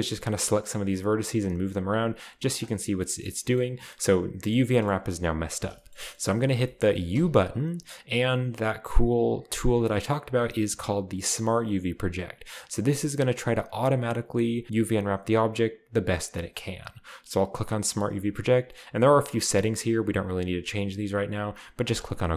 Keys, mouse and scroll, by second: 0.0-4.7 typing, 0.6-2.5 drag, 2.5 right click, 2.5 middle click, 5.7-6.6 shift+scroll up 1, 5.8 shift+middle click, 6.6 shift+scroll up 1, 6.7-7.2 typing, 17.8 click, 21.9 click, 22.1 click.